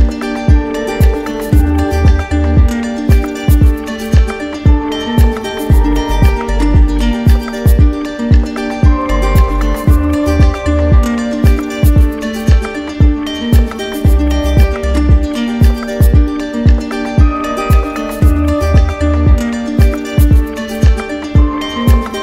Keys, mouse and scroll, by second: 0.3 alt+click, 0.8 click, 1.5 ctrl+z, 1.7 ctrl+z, 4.0 click, 4.9 click, 5.5 alt+click, 6.2 alt+click, 7.1 ctrl+click, 7.8 ctrl+click, 8.5 r, 13.3 click, 13.9 ctrl+click, 14.1 q, 15.0 click, 15.4 alt+click, 17.1 click, 17.9 click, 18.3 click, 18.4 alt+click, 18.7 shift+click, 19.2 shift+click, 19.4 click, 19.9 alt+click.